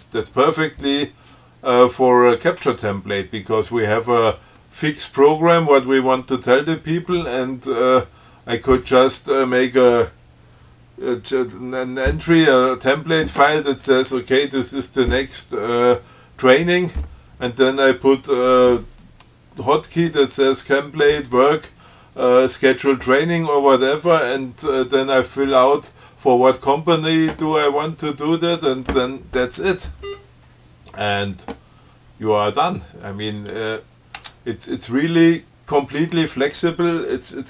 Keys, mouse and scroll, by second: 30.3 scroll up 2, 33.6 click, 34.4 Tab.